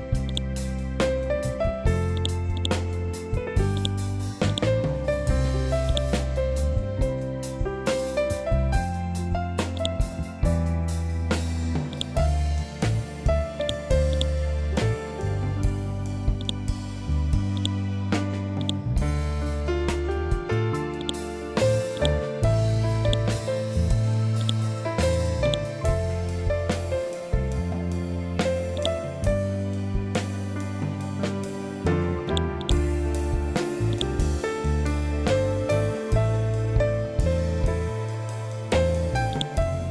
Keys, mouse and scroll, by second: 5.3-9.2 ctrl+drag, 13.1 click, 15.9 click, 18.8 ctrl+z, 20.5 click, 23.5 ctrl+z, 23.8-30.1 drag, 30.1 scroll down 1, 31.8 click, 36.3 scroll down 1, 38.8 scroll up 1, 38.8-39.9 drag.